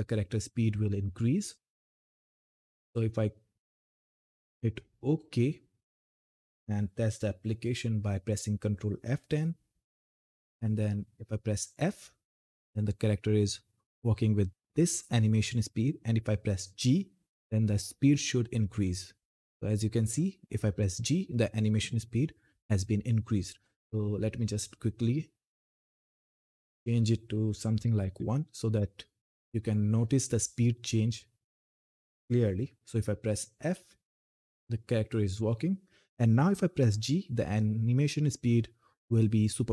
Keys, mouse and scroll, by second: 4.8 click, 7.0 ctrl+F10, 9.1-9.9 typing, 11.6 f, 18.6 g, 25.2 click, 30.0 click, 31.7 ctrl+F10, 33.3-34.2 typing.